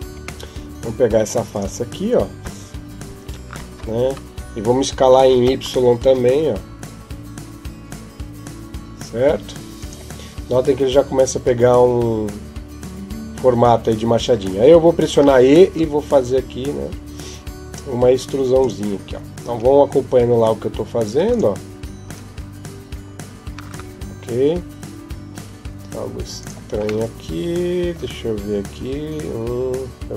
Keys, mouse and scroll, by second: 0.3 middle click, 1.3 right click, 2.2 KP_7, 5.1 s, 15.4 e, 19.3 r, 21.9 g, 26.9 middle click, 28.6 KP_1, 30.0 KP_5.